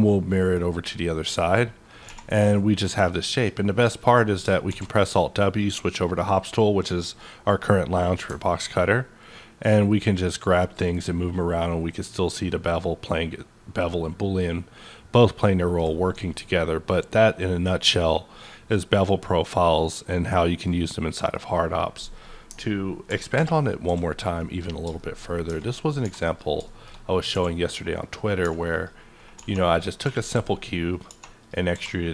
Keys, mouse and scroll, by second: 0.0-2.4 middle drag, 2.0 1, 2.4-4.6 middle drag, 3.3 click, 4.6 alt+w, 5.2-5.6 scroll down 1, 5.6-7.6 middle drag, 6.4 scroll down 1, 7.6-16.3 middle drag, 9.2-19.1 ctrl+drag, 16.3-19.1 middle drag, 20.6-23.3 middle drag, 23.1 ctrl+n, 23.3 ctrl+Return, 23.8 d, 24.3 middle click, 24.7 scroll down 1, 25.4 Tab, 26.0 3, 26.2 click, 26.6 middle click, 27.3 e, 28.0 click, 28.4-31.7 typing, 28.7 click, 29.7 click, 30.9 click, 31.4 click.